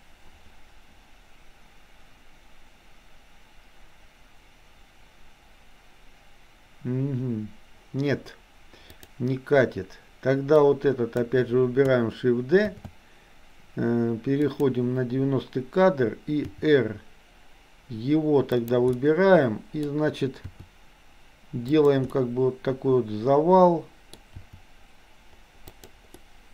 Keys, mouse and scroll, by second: 9.0 click, 10.7 click, 12.9 shift+d, 16.4 r, 19.0 middle click, 20.5 r, 22.1-24.1 middle drag, 24.4 r, 26.1-26.5 middle drag.